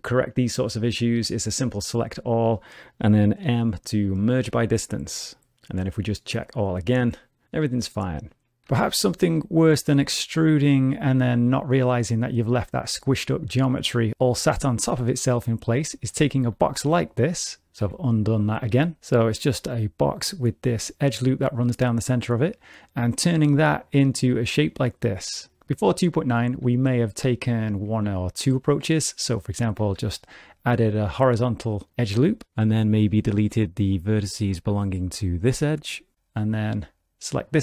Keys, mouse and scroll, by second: 1.2 middle click, 1.6 a, 3.4 m, 6.4 click, 8.6 shift+middle click, 8.7 g, 10.0 e, 12.9 g, 17.7 ctrl+z, 17.8 g, 19.0 2, 20.0 alt+click, 30.0 ctrl+r, 32.4 2, 32.9 click, 33.9 x, 36.1 click, 36.1 2.